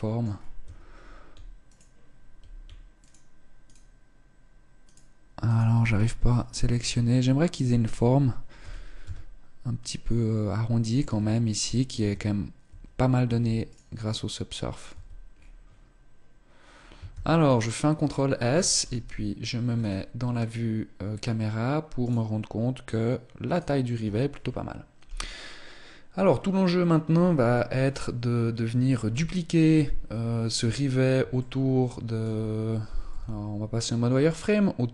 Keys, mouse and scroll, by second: 0.0-0.5 scroll up 2, 0.3 Tab, 1.3 alt+right click, 2.6 alt+right click, 3.3 alt+right click, 4.5 alt+right click, 5.1 alt+right click, 5.6 scroll up 3, 5.9 shift+middle click, 7.1 alt+right click, 8.3 g, 10.7 Tab, 11.7 Tab, 12.3 Tab, 12.9 Tab, 13.3 right click, 13.7 middle click, 14.5 Tab, 14.9-16.3 scroll down 3, 16.3-16.7 scroll down 2, 16.7 ctrl+s, 17.7-18.2 scroll down 4, 18.5 KP_0, 19.4-20.1 scroll down 1, 20.1-21.2 scroll down 1, 21.7 right click, 23.2 right click, 29.4 KP_1, 30.4-31.0 scroll down 3, 31.0 shift+middle click, 32.5 z.